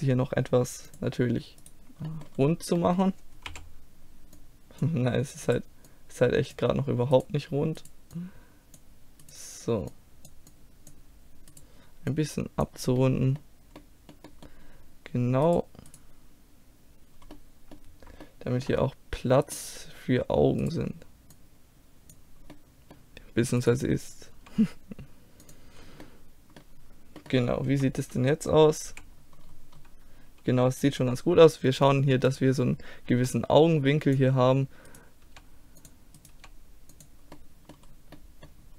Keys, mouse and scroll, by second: 1.7 right click, 2.1-3.5 middle drag, 2.8 right click, 3.5 z, 4.4 click, 5.5-6.6 drag, 5.5-6.6 right drag, 10.0-12.7 drag, 10.0 right click, 11.6-12.7 right drag, 12.7-14.1 middle drag, 15.5 middle click, 16.2-17.4 drag, 17.4 middle click, 18.8-20.7 middle drag, 20.7-22.4 drag, 21.4-22.4 right drag, 22.4-23.7 middle drag, 23.7 right click, 24.4 g, 25.3 click, 25.9-27.8 middle drag, 27.8 KP_1, 28.9 z, 29.9-32.2 drag, 32.2 middle click, 32.4 right click, 33.2 g, 33.9 click, 35.0 click, 35.3 g, 35.9 click, 36.4 g, 37.0 click, 37.4 middle click, 38.0-38.7 middle drag.